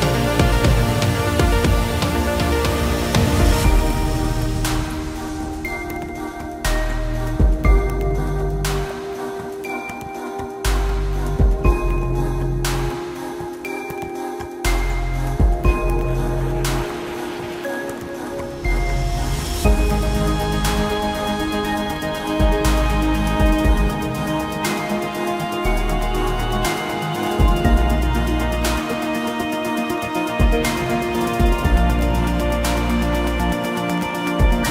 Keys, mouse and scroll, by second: 11.1 Delete, 27.7 Escape.